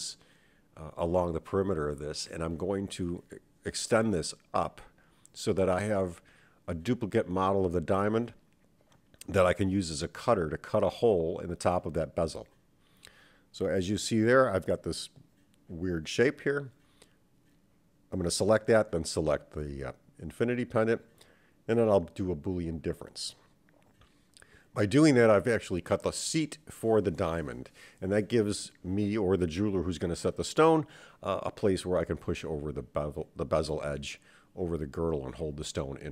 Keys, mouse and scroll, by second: 6.4 click, 6.5-9.0 drag, 9.9 Tab, 10.3 /, 13.0 click, 13.8-16.0 middle drag, 16.3 click, 18.1 shift+click, 20.7 n, 22.0-24.2 drag, 24.9-35.1 middle drag, 35.4-36.1 scroll down 3.